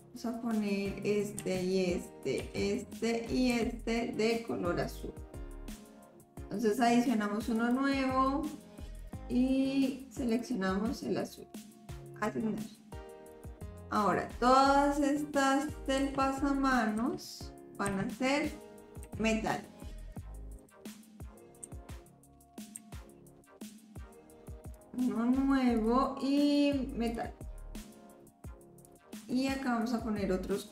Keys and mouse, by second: 1.4 l, 2.4 l, 3.6 l, 7.6 click, 9.0-10.4 drag, 12.2 click, 13.3 click, 13.6 middle click, 16.0 l, 17.0 l, 17.9 l, 19.1 click, 19.9 click, 20.6 click, 21.7 click, 22.8 click, 25.8-27.3 drag, 28.2 click, 29.0 middle click.